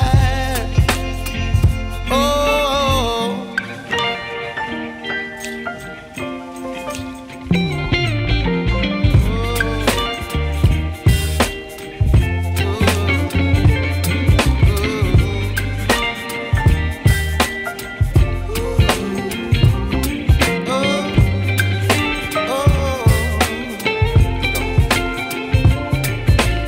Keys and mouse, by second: 1.0 click, 3.3 click, 13.3 click, 21.1 click.